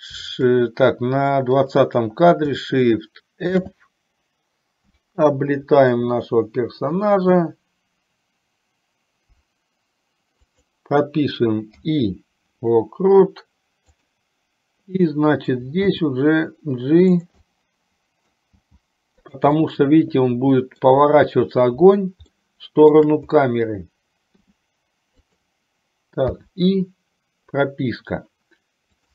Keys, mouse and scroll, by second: 2.0 click, 3.6 shift+f, 12.0 i, 14.1 click, 16.1 g, 17.6 middle click, 18.7 g, 19.7-21.0 middle drag, 22.6 shift+middle click, 24.5 r, 26.5 i.